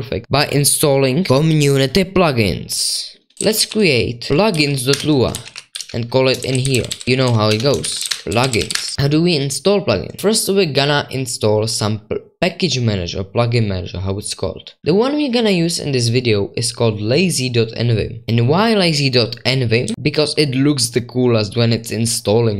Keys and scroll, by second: 3.3-9.2 typing, 19.9 super+5.